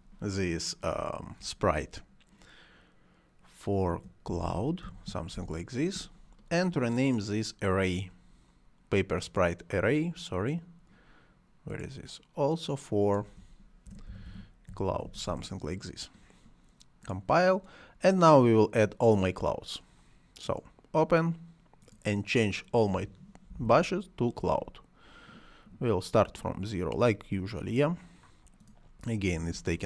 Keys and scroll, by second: 3.6-5.5 typing, 13.6-15.5 typing, 23.0-24.0 typing, 29.4 c.